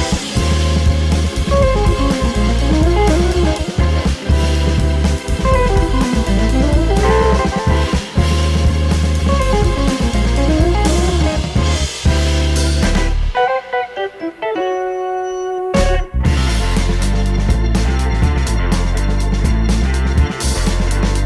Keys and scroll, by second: 10.9 super+d, 13.0 super+z, 18.5 super+z.